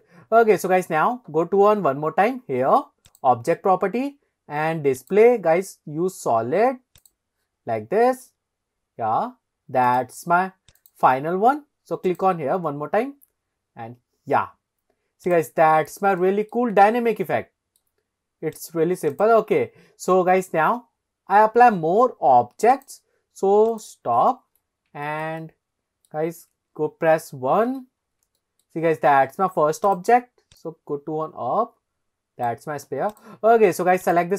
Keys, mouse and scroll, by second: 0.2 scroll up 2, 3.1 click, 3.7-5.0 scroll down 2, 5.0-7.1 drag, 8.4 scroll up 1, 10.8 click, 12.1 click, 14.2 click, 14.4 click, 14.9 click, 15.3 click, 16.2-16.6 shift+middle drag, 16.8 scroll down 1, 17.1-17.8 middle drag, 18.6 click, 19.1 click, 22.8 click, 23.7 click, 24.3-24.9 scroll down 3, 25.1 shift+middle drag, 25.4-26.1 middle drag, 26.3 scroll down 2, 27.3 KP_1, 28.1 scroll up 1, 28.4 shift+middle click, 29.9 click, 30.6 click, 30.6 scroll up 1, 33.1 click, 34.0 click.